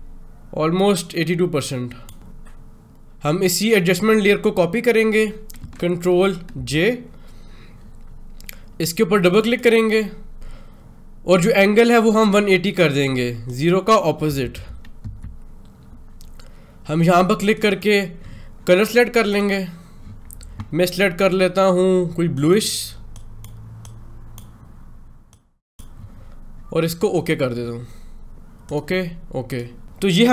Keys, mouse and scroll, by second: 6.4 j, 9.1 click, 13.4 click, 17.4 click, 22.2-27.0 drag, 29.8 Home.